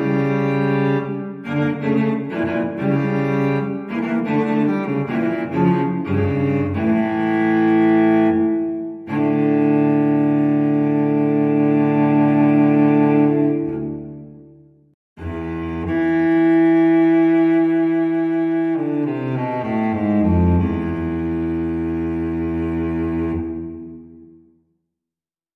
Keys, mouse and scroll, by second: 0.6 click, 2.7 click, 4.7 click, 5.4 space, 6.2 click, 6.6 click, 8.3 click, 9.4 2, 9.9 0, 11.2 click, 13.9 click, 16.0 1, 17.6-18.0 scroll down 2, 18.4-18.9 scroll up 3, 19.5 scroll up 1, 22.1-22.7 drag, 23.2 5, 24.3 click.